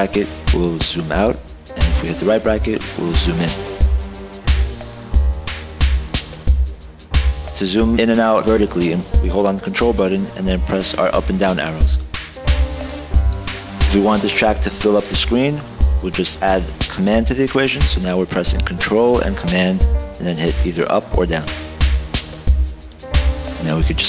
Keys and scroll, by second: 0.0 super+[, 0.2 super+[, 2.3 super+], 2.5 super+], 2.7 super+], 2.9 super+], 3.2 super+], 4.0 super+[, 4.4 super+[, 4.7 super+[, 5.0 super+[, 11.6 ctrl+Up, 12.1 ctrl+Up, 12.6 ctrl+Down, 12.8 ctrl+Down, 21.3 ctrl+super+Up, 22.0 ctrl+super+Down.